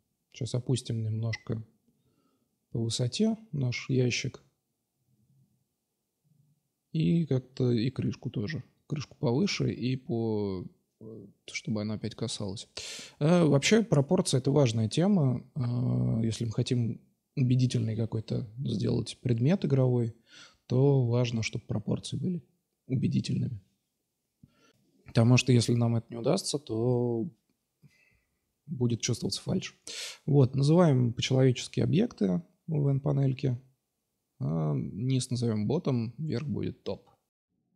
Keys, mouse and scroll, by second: 0.1-4.2 drag, 4.4-5.6 middle drag, 5.3 Tab, 6.4 KP_Divide, 6.7-7.7 drag, 7.1 Tab, 8.4 q, 9.1-10.1 drag, 10.1-10.5 middle drag, 10.9 right click, 11.8 middle click, 12.8 l, 15.4 click, 18.7-19.8 drag, 20.4 Tab, 20.9 right click, 22.2-23.9 drag, 28.5 BackSpace, 29.4 Left, 29.5 Left, 29.9 BackSpace, 30.0 BackSpace, 30.9-31.4 drag, 31.8-32.8 drag, 33.4 click, 34.5 t, 35.5-35.8 middle drag, 35.8-36.3 drag.